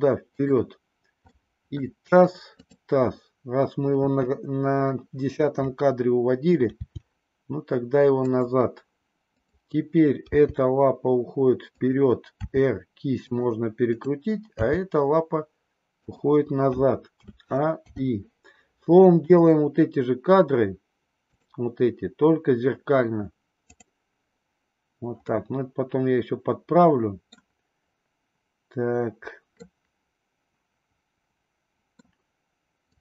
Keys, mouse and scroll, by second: 1.3-2.0 middle drag, 3.8 KP_3, 6.7 g, 9.4 click, 10.3 g, 12.4 r, 14.6 g, 17.1 a, 17.9 i, 19.3 click, 21.3 click, 23.7 click, 25.1-27.2 middle drag, 29.5-32.1 middle drag.